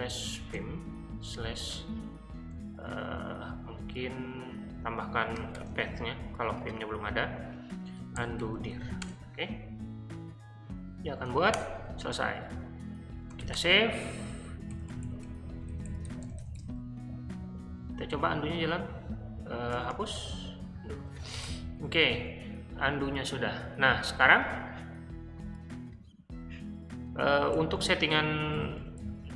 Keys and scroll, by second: 0.0-2.6 typing, 3.1 Left, 3.6-4.2 Left, 8.1 Right, 11.5 Return, 13.0-17.0 typing, 18.2 j, 19.6-22.1 typing, 27.5-28.0 typing, 28.5 ctrl+u, 28.7 ctrl+u, 28.9 ctrl+u.